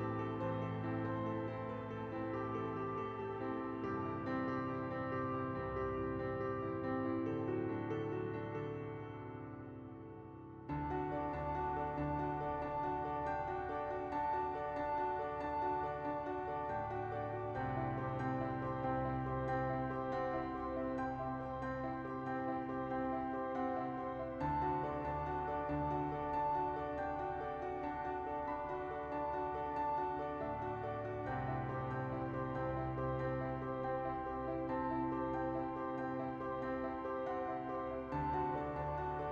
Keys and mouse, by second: 0.5 middle click, 0.8 shift+middle click, 1.1 space, 3.0 space, 4.0 shift+middle click, 4.2 right click, 4.7 shift+d, 4.8 shift+right click, 5.1 right click, 6.1 space, 12.0 space, 12.7 middle click, 13.4 middle click, 14.4-17.3 middle drag, 19.3 m, 21.5 l, 24.6 shift+middle click, 26.6 middle click, 27.2 shift+middle click, 27.8 KP_1, 29.0 middle click, 29.4-32.0 right drag, 32.0-33.8 drag, 34.6 click, 35.8 click, 36.9 space, 37.3-38.8 drag, 37.3 space, 39.2 click.